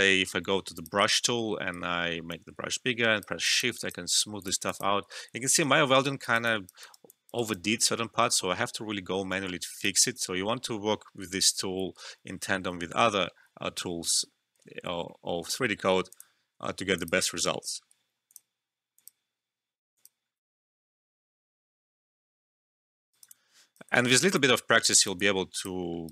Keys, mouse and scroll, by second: 0.7 click, 1.7 right click, 2.7 shift+click, 5.2 ctrl+z, 6.0 alt+middle click, 6.2 alt+right click, 6.4 alt+click, 6.8 alt+right click, 7.0 alt+click, 7.3 alt+right click, 7.6 alt+middle click, 9.0-9.7 scroll up 1, 9.7 click, 14.1 click, 16.1 click, 20.7 2, 23.1 alt+right click, 23.3 alt+click, 23.9 alt+middle click, 24.1 alt+right click, 24.3 alt+click, 24.9 alt+right click, 25.1 alt+click, 25.8 alt+middle click, 26.0 alt+right click.